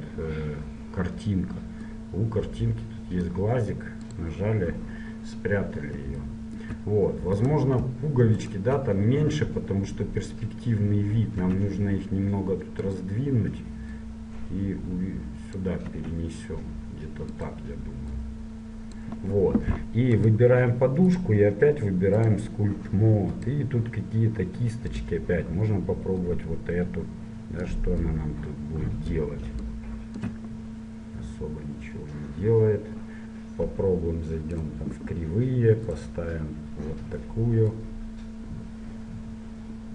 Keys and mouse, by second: 2.0-5.9 drag, 5.9-7.5 middle drag, 7.5-10.4 right drag, 11.7 s, 14.1-16.1 drag, 17.4 s, 18.3-20.2 drag, 20.4 right click, 22.5 click, 25.6 middle click, 26.3-28.1 drag, 28.3-31.7 drag, 34.7-39.7 drag.